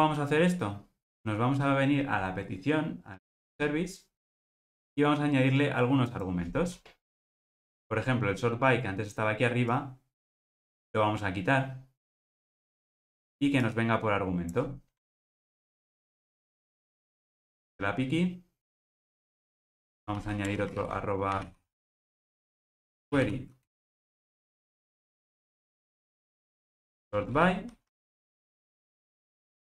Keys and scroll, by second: 13.0 super+x, 26.9 super+v.